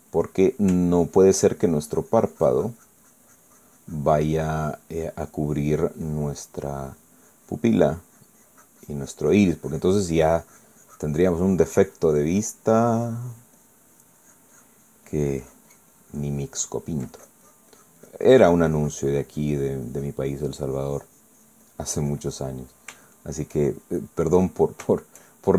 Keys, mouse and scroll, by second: 0.0 ctrl+middle click, 0.9 ctrl+middle click, 2.1-17.9 ctrl+drag, 18.1-23.4 ctrl+drag, 23.4 middle click, 24.1 shift+middle click, 24.9-25.5 shift+middle drag.